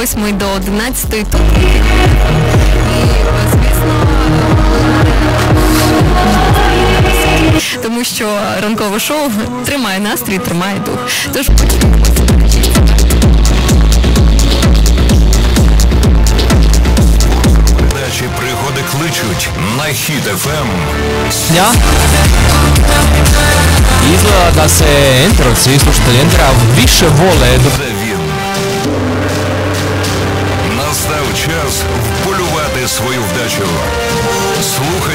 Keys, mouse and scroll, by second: 7.8 Page_Down, 17.8 Page_Down, 27.7 Page_Down.